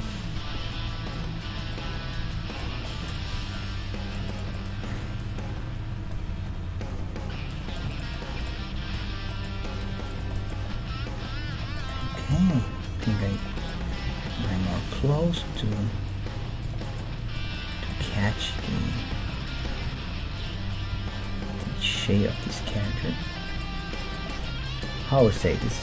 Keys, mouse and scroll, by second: 0.0 middle click, 1.1 right click, 1.3-6.5 middle drag, 3.3 Tab, 7.9 middle click, 9.0 Tab, 9.5 middle click, 9.6-11.8 right drag, 10.9 g, 11.8 middle click, 12.0-13.7 right drag, 12.3 g, 13.3-15.3 middle drag, 13.9-23.2 right drag, 14.0 g, 15.0 g, 15.9 g, 16.8-19.5 middle drag, 18.0 g, 19.1 g, 19.8 g, 20.9 g, 21.6-23.2 middle drag, 22.9 g.